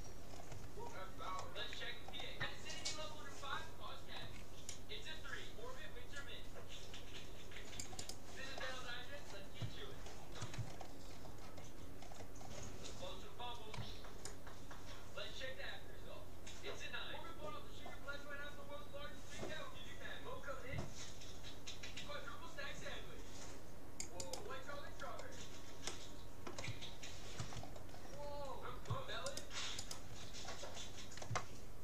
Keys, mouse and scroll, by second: 0.7-1.5 scroll up 1, 1.5-4.9 middle drag, 4.3 c, 8.5-14.3 middle drag, 10.7-11.9 scroll up 1, 13.9 c, 24.3-25.9 right drag, 24.7-28.9 middle drag, 29.3-31.5 right drag, 31.7-31.8 middle drag.